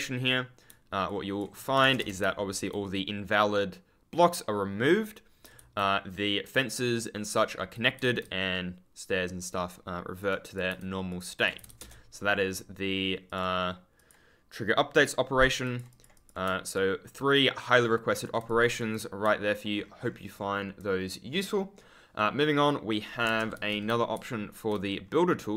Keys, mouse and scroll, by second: 1.0 ctrl+click, 1.0-1.3 scroll up 1, 1.7 Return, 2.1 w, 5.5 d, 7.9 w, 10.1 click, 10.6-12.1 typing, 11.0 click, 13.2 click, 15.6 click, 16.7 ctrl+click, 17.7-18.0 scroll down 1, 19.6 ctrl+scroll up 1, 23.5 1, 23.8 w, 24.0-24.7 scroll up 1, 24.7-25.3 scroll up 1.